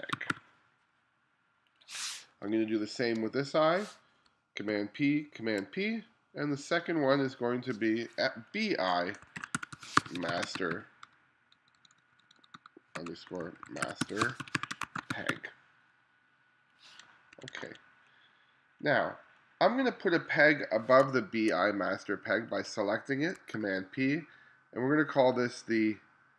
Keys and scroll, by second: 0.0-0.8 typing, 2.5 space, 4.7 super+p, 5.4 super+p, 9.1-11.3 typing, 13.0-15.8 typing, 17.4 1, 19.8 2, 20.5 2, 21.1 space, 23.6 super+p.